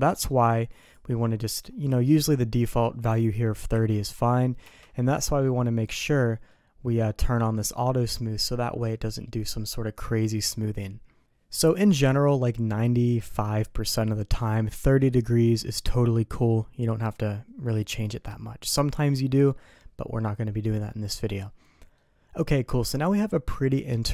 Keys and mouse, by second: 0.9-5.3 drag, 5.9 middle click, 11.6 middle click, 21.9-23.7 middle drag.